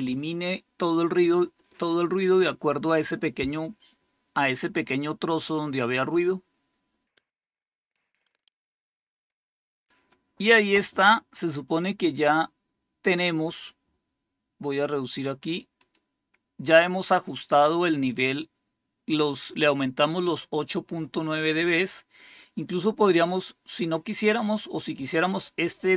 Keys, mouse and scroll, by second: 14.5 click, 15.0 click, 15.7 click.